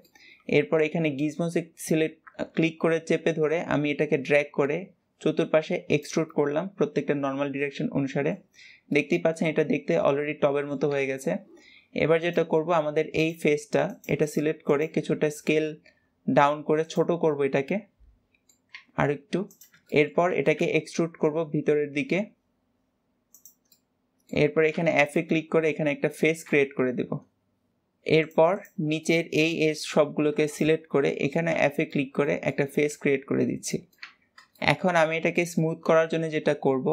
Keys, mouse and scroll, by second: 1.1 click, 6.1-8.6 middle drag, 8.6 scroll up 1, 8.8 middle click, 9.3 Tab, 9.5 scroll down 2, 9.8 middle click, 10.8 Tab, 11.1 scroll up 1, 12.1 click, 13.1 click, 13.7 alt+shift+click, 14.1 alt+shift+click, 14.5 alt+shift+click, 15.3 s, 17.2-18.7 middle drag, 18.7 s, 19.7 shift+middle click, 20.1 e, 23.6-24.6 middle drag, 24.6 f, 25.0-27.7 middle drag, 28.2 click, 28.5 click, 29.0 middle click, 29.6-30.4 scroll up 2, 30.4 alt+shift+click, 31.0 middle click, 31.4 f, 31.8-34.0 middle drag, 34.0 Tab, 34.2-34.6 scroll down 2, 34.6-35.0 shift+middle drag, 35.0-35.3 scroll up 2, 35.3-36.9 shift+middle drag.